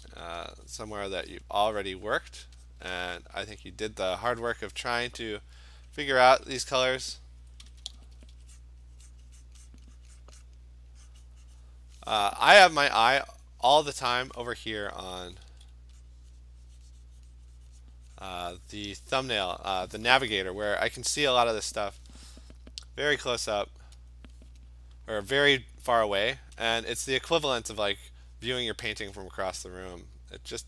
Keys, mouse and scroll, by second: 0.4 alt+click, 1.0 click, 1.4 click, 1.9 click, 2.1 click, 2.3 click, 2.7 click, 4.9 click, 5.9 click, 7.7-8.4 typing, 8.3 click, 8.6 click, 9.2 click, 9.5 click, 9.7 click, 10.1 click, 10.2 click, 10.5 click, 11.2 click, 11.7 click, 14.9 [, 15.2 [, 15.5 [, 16.1 click, 16.5 click, 17.4 click, 17.9 click, 18.4 click, 18.7 click, 21.8 click, 22.7 click, 23.3 click, 24.1 click, 25.4 click, 26.0 click, 26.7 click, 28.1 click, 29.0 click, 29.3 click.